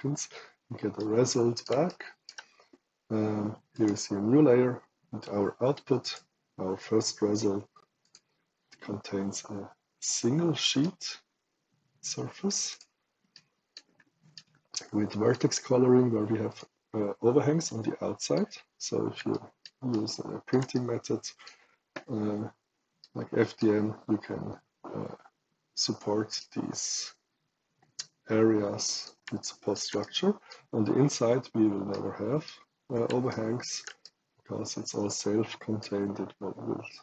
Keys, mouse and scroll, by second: 0.9 right click, 1.8 shift+right click, 3.6 shift+click, 5.9 click, 7.9 click, 9.1-9.9 middle drag, 10.7-12.4 right drag, 12.6 click, 13.2 right click, 14.3 right click, 15.0 right click, 16.4 click, 17.6 right click, 19.2 shift+right click, 19.8 shift+right click, 20.7 shift+right click, 22.9 shift+right click, 26.3-29.0 right drag, 29.3 shift+right click, 29.9 shift+right click, 31.8 shift+right click, 33.2 shift+right click, 34.0-35.7 shift+right drag.